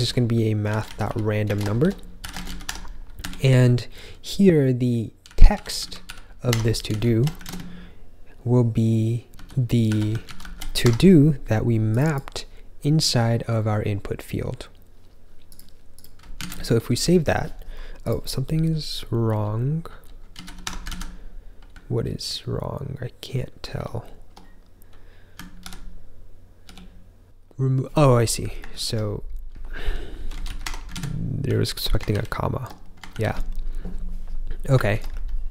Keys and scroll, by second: 0.0-3.1 typing, 4.9-7.4 typing, 8.6-11.0 typing, 16.3 super+s, 19.2-21.9 typing, 23.6 ctrl+j, 23.9 ctrl+j, 25.5 super+-, 26.6 super+-, 28.9 ctrl+k, 29.2-33.0 typing, 32.0 ctrl+j, 32.3 ctrl+j, 33.3 ctrl+k, 35.0 ctrl+j.